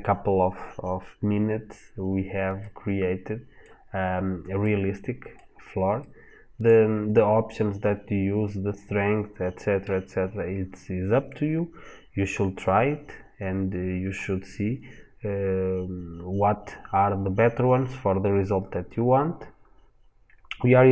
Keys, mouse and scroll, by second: 2.4 middle click, 3.4 scroll down 1, 4.4 middle click.